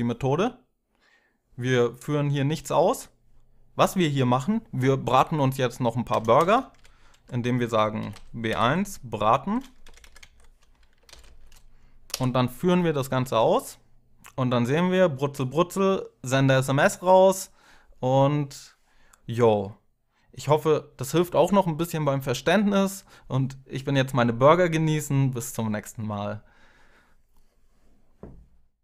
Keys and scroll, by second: 5.9 Return, 6.1 Return, 6.5 Up, 6.9 Down, 7.5-8.8 typing, 9.6 Up, 9.8 Up, 9.9 Tab, 10.5-11.2 typing, 12.6 Up, 13.0 Tab, 14.9 F5.